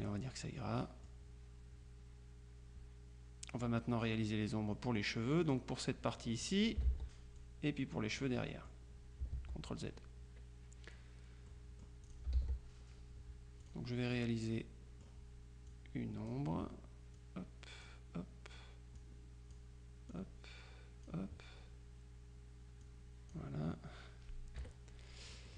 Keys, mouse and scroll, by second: 0.1 click, 5.5 click, 6.9 ctrl+z, 7.4-9.3 ctrl+drag, 8.6 right click, 9.4 ctrl+z, 11.6-12.7 drag, 12.4 ctrl+s, 13.7 click, 15.8 click, 17.2 click, 19.0-20.1 drag, 20.2 click, 22.9 click, 24.7 KP_Subtract.